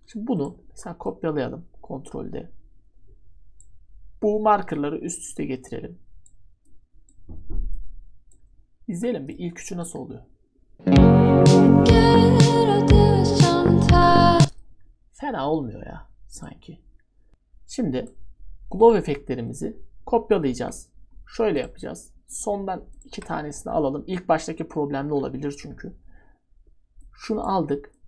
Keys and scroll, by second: 4.6 ctrl+d, 17.3 ctrl+z, 23.5 ctrl+d.